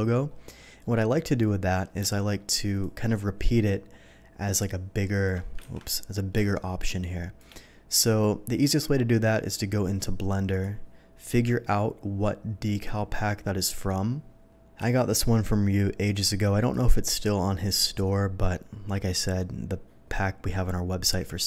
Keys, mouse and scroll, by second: 0.6 scroll up 1, 0.6 middle click, 2.0 space, 2.0 click, 2.5 space, 4.6 alt+click, 5.6 ctrl+z, 6.3 space, 6.4 click, 6.9 space, 10.5 click, 14.9 v, 16.7 click.